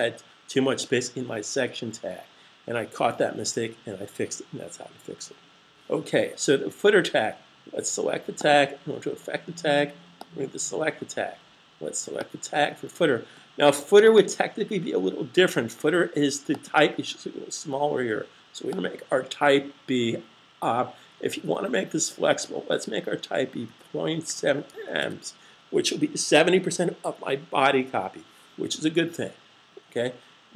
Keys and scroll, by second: 22.6-24.1 typing.